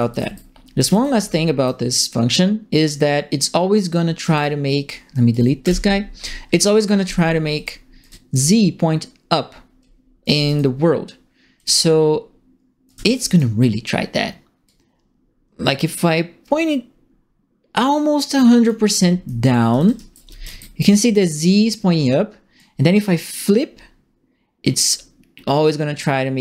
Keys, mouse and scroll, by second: 0.0-1.6 typing, 3.7 right click, 4.2 q, 5.3 click, 5.6 Delete, 7.5 click, 8.0 right click, 8.2 a, 10.0-10.9 typing, 10.2 right click, 11.5 click, 12.6-13.4 typing, 12.8 right click, 14.6-18.1 drag, 18.1 right click, 18.7-20.9 typing, 18.8-20.8 right drag, 22.5-26.4 drag.